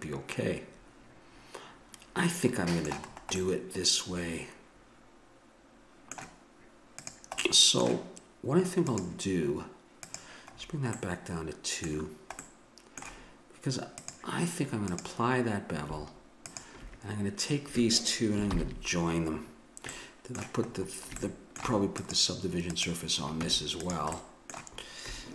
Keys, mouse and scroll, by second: 3.4-5.2 middle drag, 7.0 click, 7.5-12.5 middle drag, 13.3 middle click, 14.0-18.2 drag, 18.5 ctrl+j, 19.9-21.9 middle drag, 23.3 Tab.